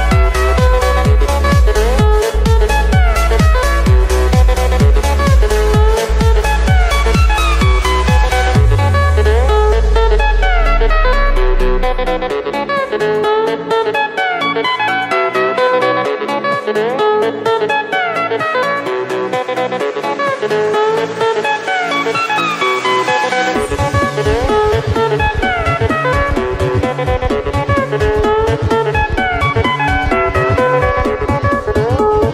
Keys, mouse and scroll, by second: 1.0-2.0 scroll up 5, 2.0-4.0 middle drag, 4.0 ctrl+z, 6.1 KP_7, 7.2-7.9 scroll up 4, 7.9 shift+middle click, 8.5 Tab, 9.3 z, 10.3 click, 11.1-11.5 scroll up 1, 13.0 b, 14.7 b, 16.6 x, 18.7 Tab, 21.7-22.3 drag, 22.3-22.6 scroll down 1, 22.6-26.2 middle drag, 27.6 click, 29.5-32.3 drag.